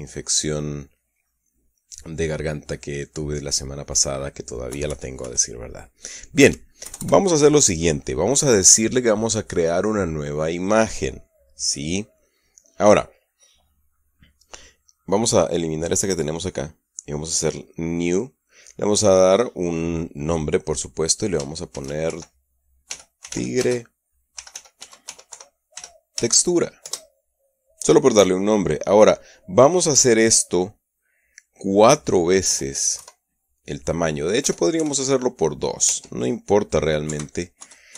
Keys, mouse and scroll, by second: 5.1 KP_Subtract, 7.3 KP_Add, 16.1 click, 18.3 click, 19.7 click, 22.2-26.6 typing, 27.3 Return, 29.2 click, 29.9 click, 33.5 KP_4, 34.9 BackSpace, 35.3 KP_2, 36.3 Tab, 37.5 Right.